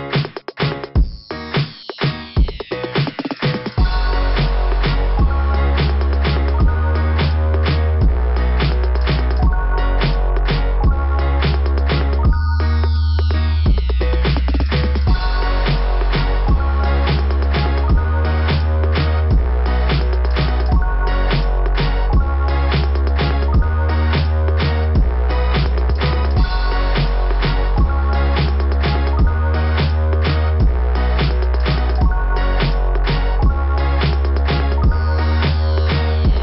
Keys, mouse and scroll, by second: 0.3 click, 3.0-3.5 scroll down 3, 4.0-4.7 scroll down 6, 7.3 click, 7.5 click, 8.1 click, 8.2 click, 9.7 click, 9.8 click, 10.0 click, 10.1 click, 11.0 click, 12.1 click, 13.9 click, 14.0 click, 14.5 scroll up 2, 17.5 click, 18.4 click, 21.0 click, 21.4 click, 23.0 click, 36.2 click, 36.3 click.